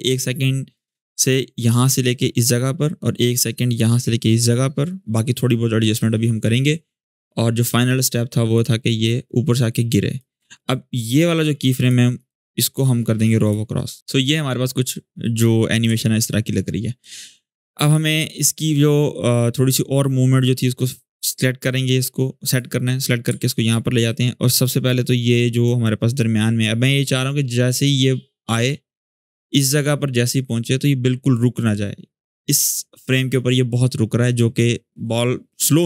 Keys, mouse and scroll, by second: 8.3-10.0 drag, 10.2 alt+scroll up 1, 10.9-11.9 click, 11.9 right click, 13.2 click, 14.0 space, 14.9-15.6 click, 15.7 alt+scroll down 1, 17.1-18.3 drag, 23.1 alt+scroll up 1, 23.8-24.4 drag.